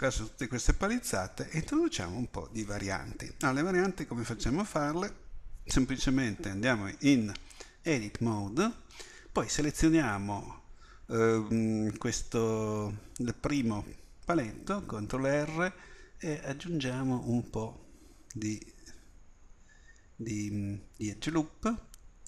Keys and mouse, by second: 7.9 Tab, 15.0 ctrl+r.